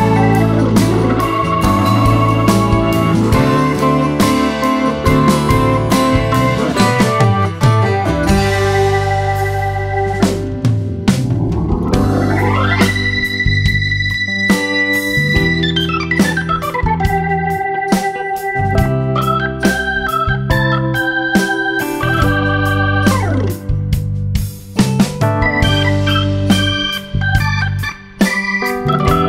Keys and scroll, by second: 5.2 space, 8.3 Home, 8.4 Escape, 8.9 space, 11.5 super+-, 13.0 space, 23.1 space, 25.2 super+=, 27.5 space.